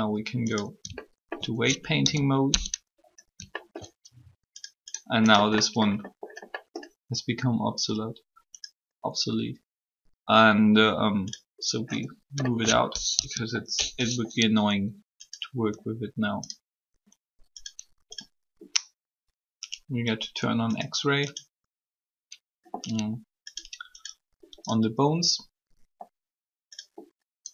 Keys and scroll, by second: 1.9 shift+z, 12.9 alt+shift+3.